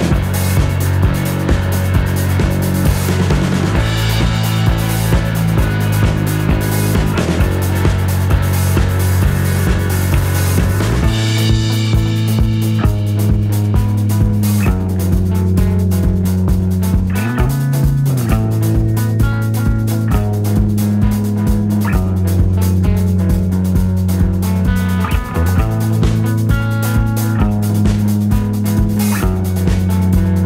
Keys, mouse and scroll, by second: 0.5 shift+click, 2.0 click, 3.2 click, 4.7 ctrl+z, 5.9 click, 6.5 ctrl+z, 7.1 ctrl+click, 9.7 click, 12.3-15.7 shift+drag, 16.8-19.6 shift+drag, 21.2 KP_Add, 22.0 click, 23.3-24.9 shift+drag, 25.4 shift+click, 26.8-30.4 shift+drag.